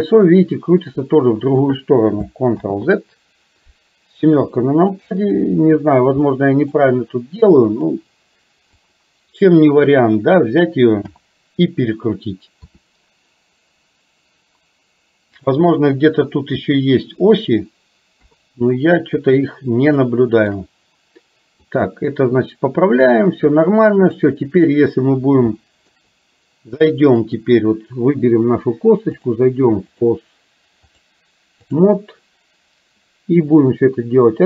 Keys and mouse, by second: 2.7 ctrl+z, 4.5 KP_7, 6.3 middle click, 7.7 click, 8.9 click, 11.1 KP_7, 12.7 r, 18.2 KP_3, 19.9 shift+middle click, 21.8-23.2 drag, 24.1 click, 25.6 shift+middle click, 27.3 click, 29.2 click, 31.0 click, 33.7-34.4 drag.